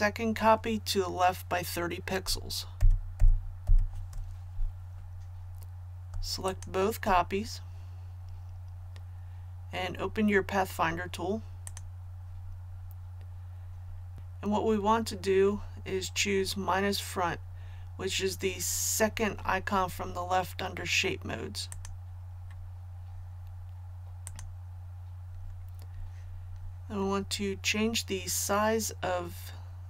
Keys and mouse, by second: 2.8 shift+Left, 3.2 shift+Left, 3.6 shift+Left, 6.5 shift+click, 11.7 click.